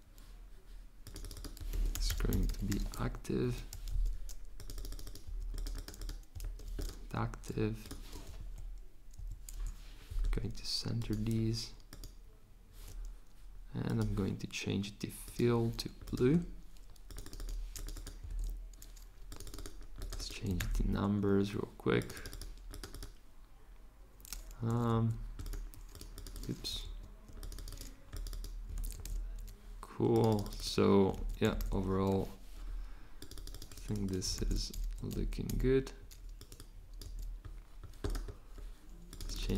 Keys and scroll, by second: 1.5-3.8 typing, 6.4 v, 17.9-18.8 typing, 20.2-21.1 typing, 24.4-25.5 typing, 26.8 z, 28.4-29.5 typing, 30.8-32.1 typing, 34.0-35.9 typing, 37.0 2.